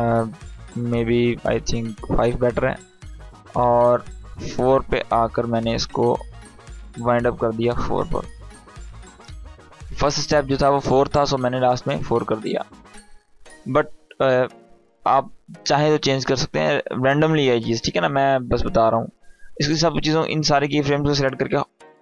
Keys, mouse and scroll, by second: 3.1-4.9 drag, 19.3-20.2 drag.